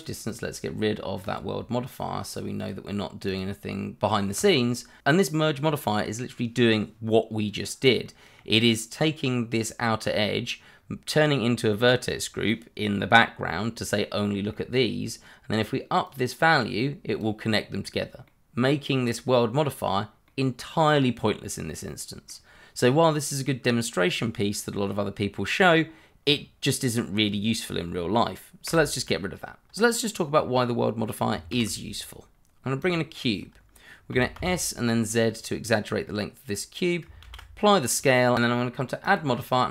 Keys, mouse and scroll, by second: 0.3 double click, 1.1 click, 2.4 double click, 3.0 click, 7.3 middle click, 10.7-12.1 scroll down 1, 12.1-14.2 scroll up 1, 14.5 middle click, 16.0 click, 17.5-18.2 scroll down 1, 18.2 middle click, 28.6 Delete, 29.6 scroll down 1, 29.8 middle click, 31.8 shift+a, 32.8 click, 33.5 scroll down 1, 34.1 s, 34.3 z, 35.4 click, 36.0 middle click, 37.2 ctrl+a, 38.0 click, 39.0 click.